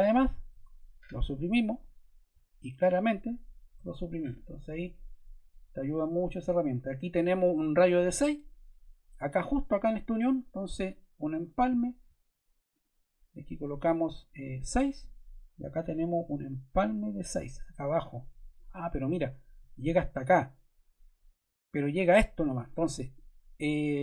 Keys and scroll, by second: 0.5 BackSpace, 3.7 BackSpace, 14.4 6, 14.6 Return.